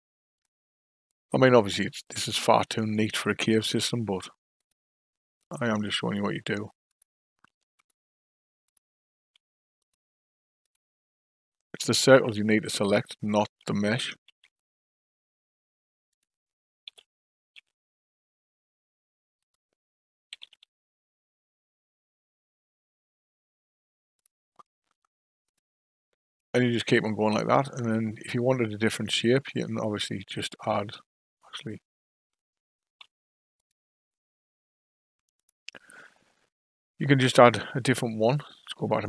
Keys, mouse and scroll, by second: 2.6 click, 3.8 shift+click, 4.6 shift+click, 5.4 shift+click, 6.0 shift+click, 6.9 shift+click, 7.7 click, 8.6 click, 9.8 shift+click, 10.6 shift+click, 11.8 shift+click, 12.9 shift+click, 14.3 shift+d, 16.9 g, 20.3 g, 25.4 click, 28.9-31.7 drag, 32.8 shift+s, 35.4-38.4 drag.